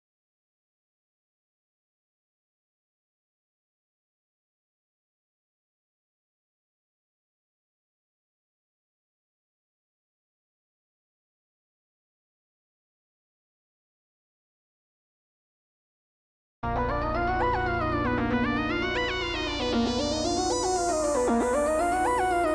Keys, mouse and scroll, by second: 0.4 alt+shift+click, 0.7-1.4 middle drag, 1.4 alt+shift+scroll down 1, 1.6 alt+shift+click, 2.1-3.2 drag, 3.4 shift+click, 4.1 click, 5.6 shift+click, 6.0-7.1 drag, 7.0 scroll down 2, 7.1-8.0 middle drag, 7.6-8.0 scroll up 2, 8.0 click, 8.2 shift+drag, 8.8 shift+click, 9.4-10.1 drag, 11.3 click, 11.8 scroll up 1, 12.0-13.5 middle drag, 12.3 scroll down 1, 12.9-13.5 scroll up 1, 13.5 click, 13.8 alt+shift+click, 14.8 click, 15.7 middle click, 16.4 click, 16.9 click, 17.2 alt+shift+click, 18.2 middle click, 19.0 alt+shift+click, 19.3-20.9 shift+middle drag, 20.1-20.9 scroll up 2, 20.9 alt+shift+click, 21.1 scroll down 1, 21.3-22.5 middle drag, 22.3-22.5 shift+scroll up 2.